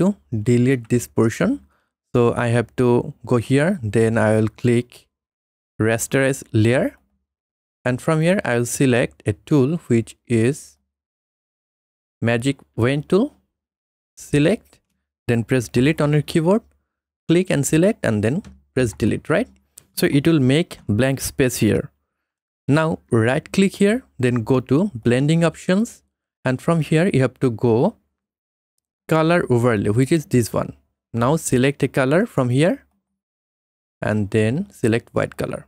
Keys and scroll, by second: 15.8 Delete, 19.0 Delete, 22.2 ctrl+d.